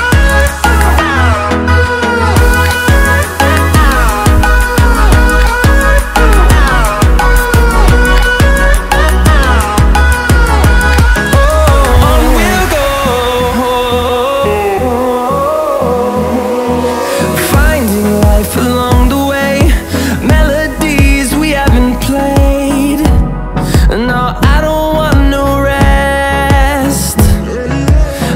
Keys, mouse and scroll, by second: 2.3 click, 7.4 click, 8.8-10.4 typing, 11.3 click, 12.3 -, 13.4-13.9 typing, 14.7 click, 15.8-17.0 typing, 23.2 click, 25.5-26.8 typing.